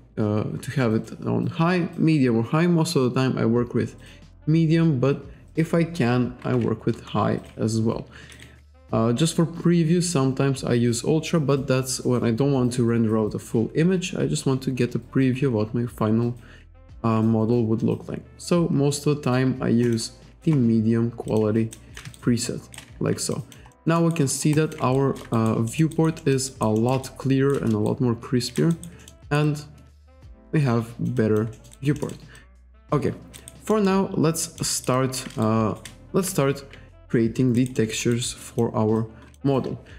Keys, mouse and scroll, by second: 19.9 click, 21.3 click, 21.8 alt+right click, 22.2 shift+right click, 23.3 alt+click, 23.7 alt+middle click, 23.9 alt+scroll up 1, 24.0 alt+right click, 24.3 alt+middle click, 24.6 alt+click, 25.0 shift+right click, 25.4 alt+right click, 25.7 alt+middle click, 25.9 alt+right click, 27.1 shift+right click, 27.9 shift+right click, 28.7 alt+right click, 29.0 alt+middle click, 29.2 alt+right click, 29.5 alt+click, 31.6 alt+middle click, 31.8 alt+right click, 32.4 alt+click, 32.8 alt+middle click, 33.4 alt+right click, 33.7 alt+middle click, 34.5 alt+middle click, 34.7 alt+right click, 35.0 alt+click, 35.5 shift+right click, 36.3 F1, 37.6 alt+right click, 37.8 alt+middle click, 38.1 alt+right click, 38.4 alt+click, 39.0 alt+click.